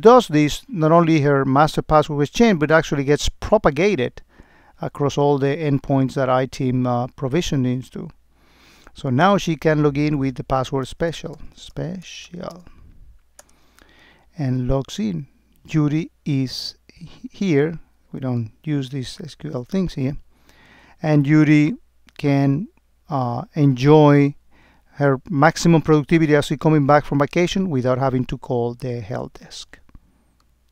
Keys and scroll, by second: 13.4 Return.